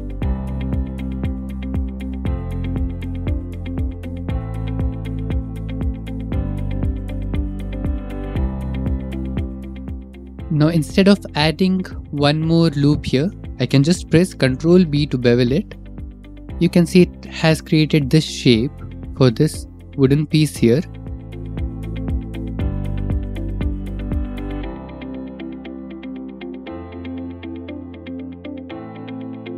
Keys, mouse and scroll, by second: 0.6 click, 0.7 click, 1.1 ctrl+r, 2.1 click, 2.1 click, 3.9 ctrl+r, 5.4 click, 6.1 click, 6.6 ctrl+r, 6.9 middle click, 7.1 middle click, 8.2 click, 8.6 Escape, 8.6-9.9 typing, 9.7 click, 12.1 click, 12.6 middle click, 14.2-14.6 scroll, 16.2 ctrl+b, 19.9 click, 20.6 click, 21.0 middle click, 23.0 ctrl+r, 24.2 click, 24.3 click, 25.4 ctrl+r, 26.5 click, 26.8 right click, 27.5 ctrl+e, 28.0 Escape, 28.6 ctrl+r.